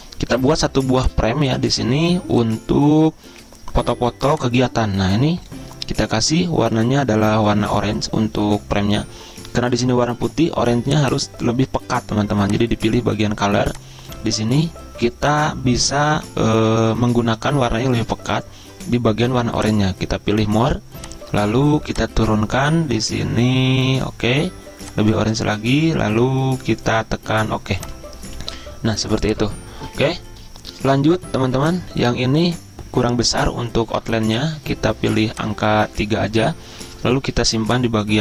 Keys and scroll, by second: 33.9 ctrl+z.